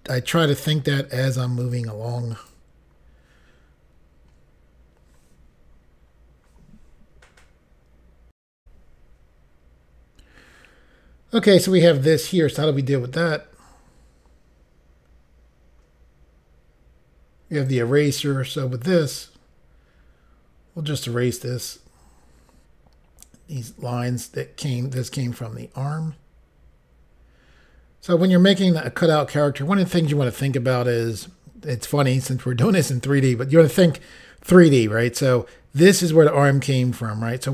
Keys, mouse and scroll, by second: 1.8 click, 2.5 click, 8.6 Insert, 9.4 Pause, 17.6 click, 19.0 click.